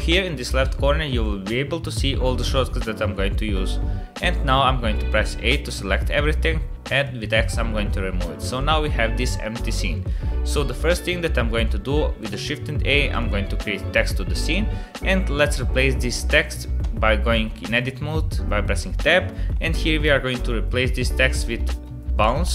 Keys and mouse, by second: 4.5 a, 6.4 x, 8.5-10.0 middle drag, 11.6-12.2 middle drag, 12.4 shift+a, 16.8 Tab, 19.5-22.4 typing.